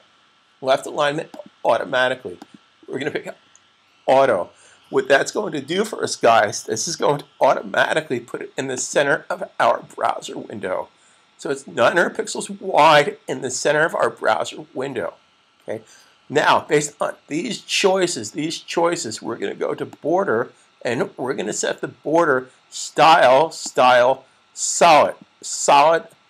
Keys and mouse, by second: 0.9 click, 8.8 click, 11.8 click, 19.6 click, 23.3 click.